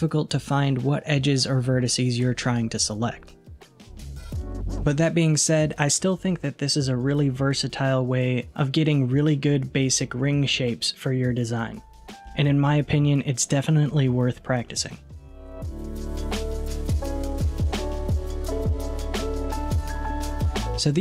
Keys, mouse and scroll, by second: 2.5-4.9 middle drag, 4.9 alt+z, 5.4-8.0 scroll down 2, 8.0 Tab, 9.7-12.7 middle drag.